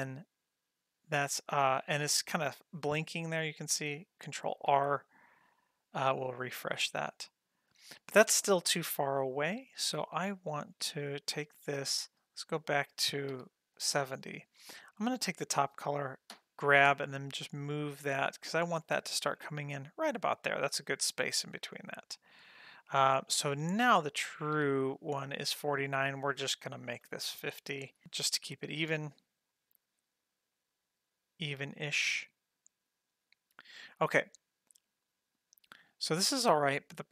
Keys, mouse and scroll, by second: 4.5 ctrl+r, 6.5-12.1 drag, 13.3 Page_Down, 15.0 click, 17.4 g, 24.6 Page_Down, 26.9 Right, 27.9 s, 29.5-37.1 drag.